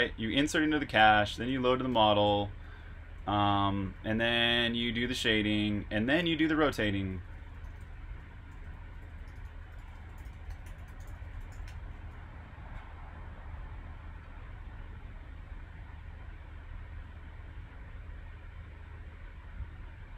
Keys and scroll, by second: 14.3 typing, 17.7-18.1 typing.